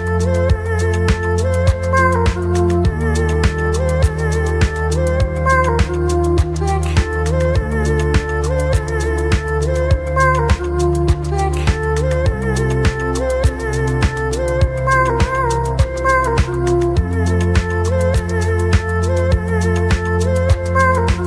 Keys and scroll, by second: 1.9 ctrl+v, 3.2 ctrl+a, 15.1 ctrl+a, 18.3 ctrl+a, 21.1 Delete.